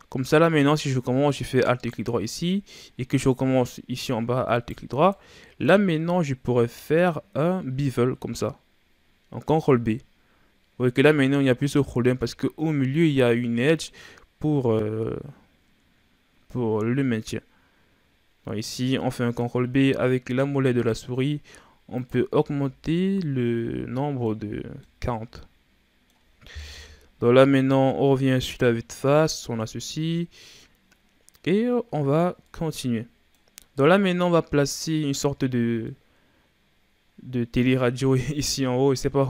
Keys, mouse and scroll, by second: 1.7 alt+right click, 3.3-4.5 middle drag, 4.5 alt+shift+right click, 5.1-6.6 middle drag, 6.6 ctrl+b, 22.3 Tab, 22.8-23.2 scroll down 1, 23.2-24.4 middle drag, 24.4 a, 24.6 scroll down 2, 24.8-26.7 middle drag, 26.7 KP_1, 28.1-28.8 scroll down 3, 28.9-30.6 scroll up 4, 30.6-32.0 scroll down 3, 32.0-32.4 shift+scroll up 3, 32.4-33.5 middle drag, 33.5-34.1 scroll up 3, 34.9-38.8 middle drag.